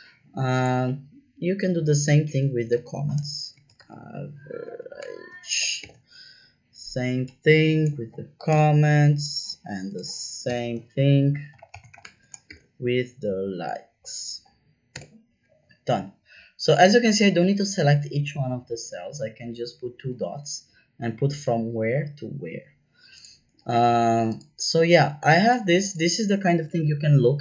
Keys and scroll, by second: 2.7-5.7 typing, 8.4 Return, 10.4-12.9 typing, 14.9 Return.